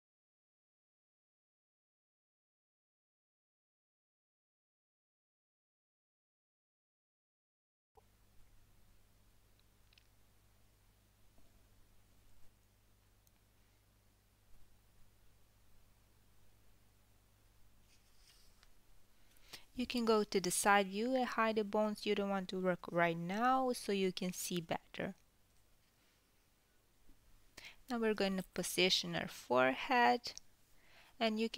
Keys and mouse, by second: 1.0 click, 2.0 KP_3, 2.2-4.5 middle drag, 3.2 g, 6.0 click, 7.5 KP_1, 8.7 g, 10.4 click, 11.6 g, 14.0 KP_1, 14.0 g, 14.7 ctrl+middle click, 14.8-19.6 ctrl+middle drag, 21.6 h, 22.0 click, 22.4 h, 23.0 click, 23.4 h, 25.8-31.5 drag, 27.4 h, 28.6 KP_1.